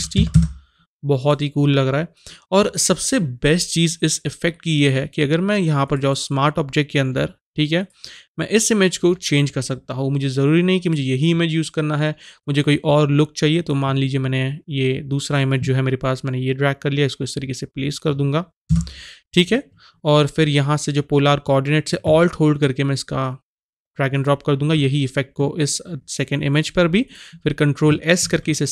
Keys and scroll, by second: 0.0 KP_0, 0.2 KP_0, 0.3 Return, 18.7 shift+Return, 28.3 ctrl+s.